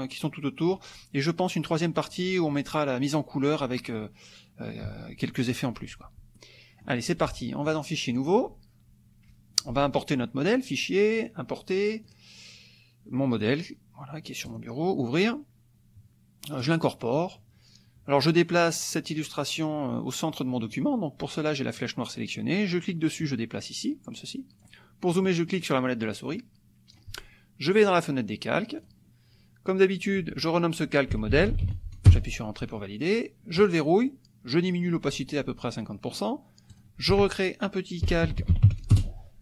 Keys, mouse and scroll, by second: 6.4 click, 7.6 click, 10.4 click, 12.0 click, 13.3 click, 14.4 click, 16.6 click, 21.8 click, 22.8-25.1 drag, 25.1 middle click, 25.6 middle click, 26.3 click, 27.8 click, 28.9 click, 29.8 click, 30.8-32.0 typing, 32.1 Return, 33.6 click, 34.6 click, 36.7 click, 37.8-39.1 typing.